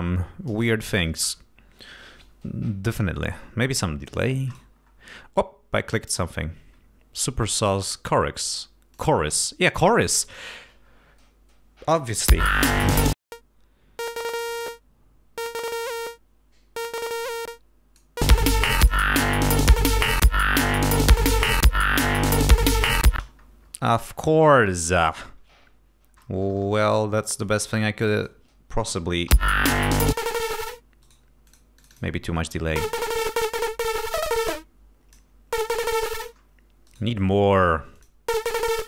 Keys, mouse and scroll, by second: 3.1-3.6 scroll down 2, 4.6-5.2 scroll up 2, 9.0 click, 10.0 click, 12.4 l, 13.2-18.2 drag, 18.9 click, 19.9 click, 20.5 click, 21.7 click, 23.0 click, 23.7 space, 23.7-24.3 scroll down 2, 24.3 scroll up 2, 25.2 click, 27.7 g, 28.1 click, 29.4 l, 30.2 click, 31.1 right click, 31.6 click, 31.9 click, 32.9-34.1 drag, 34.3-35.4 drag, 36.3 click, 37.1 right click, 38.1 click, 38.7 right click.